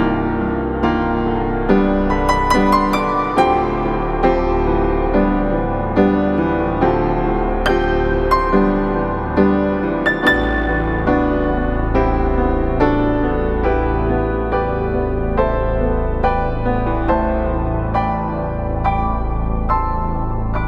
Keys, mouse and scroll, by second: 0.9 click, 1.1 scroll down 1, 1.3-1.9 scroll up 1, 1.9 right click, 2.3 scroll down 1, 2.4 scroll up 1, 2.5 right click, 3.2 click, 3.9 right click, 4.7 scroll up 1, 4.8 right click, 5.2 scroll down 1, 5.4 scroll up 1, 5.4 right click, 6.1-6.5 scroll up 1, 6.5 scroll down 1, 6.9 right click, 7.6 scroll up 1, 7.8 right click, 8.2-8.7 scroll up 1, 8.7-9.4 scroll down 2, 8.9 right click, 9.4 right click, 10.1 click, 10.7 right click, 11.0 scroll down 1, 11.1 scroll up 1, 11.3 right click, 12.5 scroll up 1, 14.4 click, 14.7 right click, 14.9 scroll down 1, 15.1 scroll up 1, 15.6 click, 17.4-17.9 scroll down 1, 17.9 scroll up 1, 18.5 click, 18.8 right click, 19.3-19.9 scroll up 1, 19.9 click, 20.2 right click, 20.6 scroll down 1.